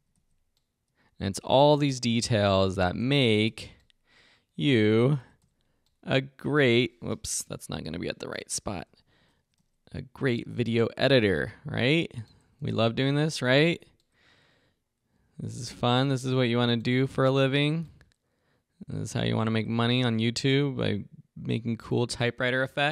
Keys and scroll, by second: 2.6 Right, 4.8 Right, 8.6 super+Left, 9.3 Right, 12.4 Right, 13.2 Left, 13.6 Right, 16.9 Right, 19.2 Right.